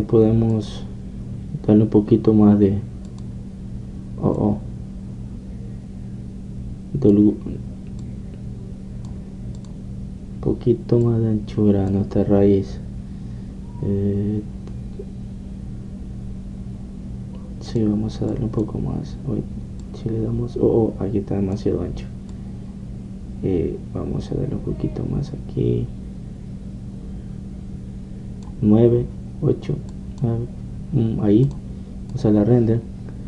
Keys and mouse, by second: 0.0 Escape, 1.8-22.7 drag, 22.7 middle click, 23.4-31.0 drag, 31.0 middle click.